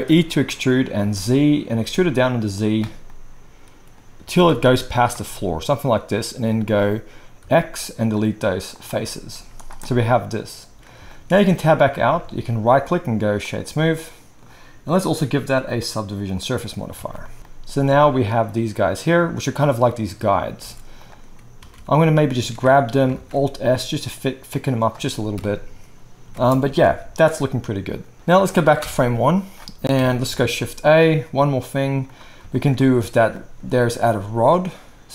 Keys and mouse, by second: 0.0 e, 2.6-12.7 middle drag, 4.2 g, 7.4 x, 9.3 z, 11.5 Tab, 12.7-15.0 right drag, 16.7-21.0 alt+middle drag, 17.1 alt+a, 17.7 space, 20.6 space, 21.0-24.5 right drag, 21.6 Tab, 22.4 a, 23.1 alt+s, 24.6-28.8 shift+right drag, 25.3 KP_1, 26.3 Tab, 26.3 space, 26.3 space, 26.8 alt+a, 28.8 shift+Left, 28.8-33.4 shift+drag, 29.9 KP_1, 30.3 shift+a, 33.9 s.